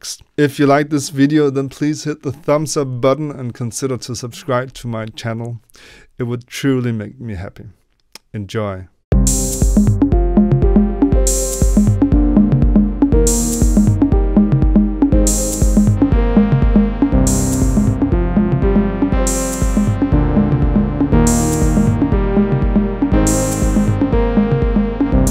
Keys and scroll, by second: 9.5 Tab, 13.8 Delete, 14.7 Tab, 19.5 n, 22.3 n, 23.9 n, 24.5 b, 25.0 Up, 25.0 ctrl+d, 25.0 Right, 25.0 Left.